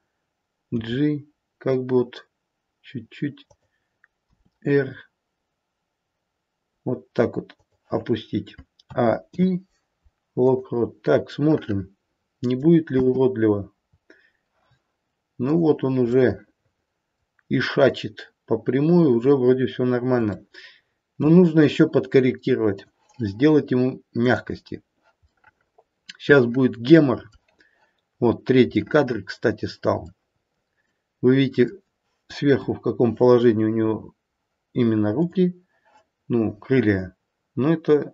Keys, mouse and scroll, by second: 0.7 g, 4.3 r, 8.7 a, 9.2 i, 11.4 middle click, 12.5 middle click, 12.9 space, 14.0-15.5 scroll down 1, 15.5 click, 15.5-16.0 scroll down 1, 16.0 middle click, 17.0 middle click, 20.2 shift+middle click, 22.8 click, 24.2 click, 25.3 middle click, 26.4 middle click, 27.1 middle click, 28.2-28.8 scroll up 4, 28.8 middle click, 28.8-29.3 scroll up 1, 29.3 middle click, 30.1-30.8 scroll down 1, 30.8 middle click, 30.8-31.5 scroll down 2, 31.5 middle click, 32.4 KP_7, 33.3-35.1 scroll down 1, 35.1 click.